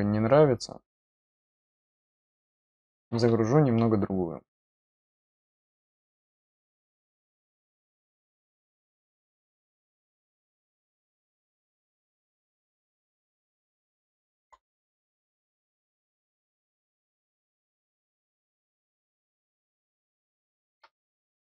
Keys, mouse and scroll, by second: 2.0 click, 4.8 click, 12.7 middle click, 12.7 scroll up 1, 13.0 middle click, 13.7 middle click, 16.0 click, 19.5 click.